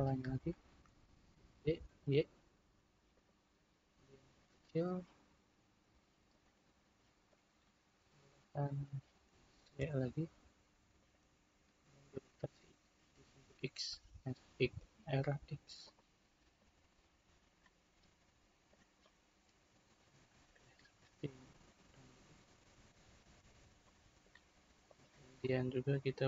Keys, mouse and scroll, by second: 1.3 shift+d, 4.2 s, 7.3 click, 9.4 s, 12.1 r, 16.6-18.3 drag, 19.0-21.0 middle drag, 21.0 click, 22.3 click, 23.1-24.8 middle drag, 24.8 click, 25.4-26.2 middle drag.